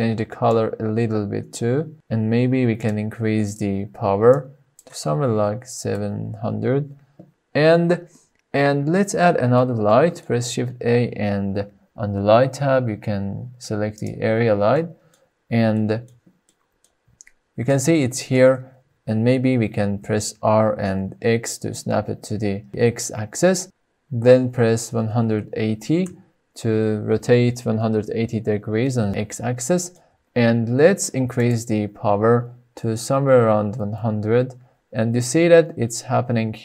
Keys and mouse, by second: 3.4-6.8 drag, 8.5-9.3 middle drag, 9.6-9.9 middle drag, 10.2 shift+a, 14.5-14.9 middle drag, 15.4-15.8 shift+drag, 16.2 click, 17.4-18.1 shift+middle drag, 19.6 r, 20.7 x, 23.6 BackSpace, 24.7 KP_1, 24.7 KP_8, 25.1 KP_0, 25.9 KP_Enter, 28.8-29.5 middle drag, 32.0-34.5 drag, 32.8 KP_0.